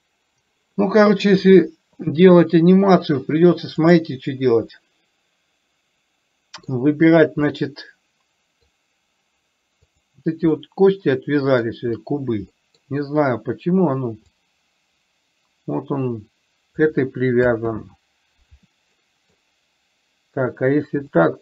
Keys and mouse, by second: 4.2 click, 5.2-7.0 middle drag, 7.8-9.0 middle drag, 10.2 click, 10.9-12.0 middle drag, 12.9 middle click, 14.7-17.2 drag, 18.0 ctrl+z, 19.3-19.7 middle drag.